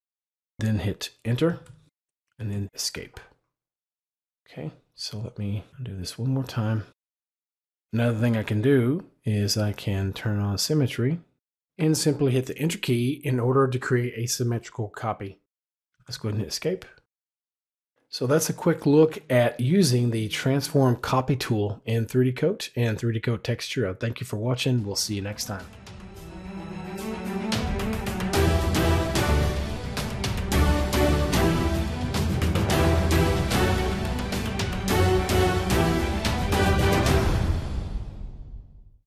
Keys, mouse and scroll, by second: 1.4 Return, 2.3 Escape, 5.7 ctrl+z, 9.1 s, 9.8 click, 12.2 Return, 15.9 Escape.